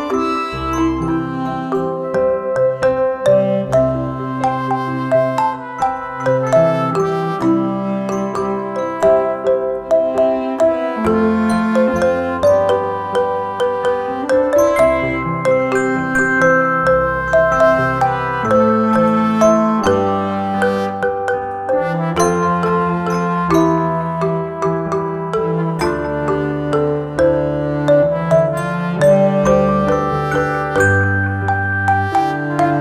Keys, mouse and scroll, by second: 3.2 right click, 4.5 click, 6.6 right click, 7.3 click, 10.3 right click, 11.1-17.9 drag, 22.1-32.5 drag, 32.5 alt+shift+click.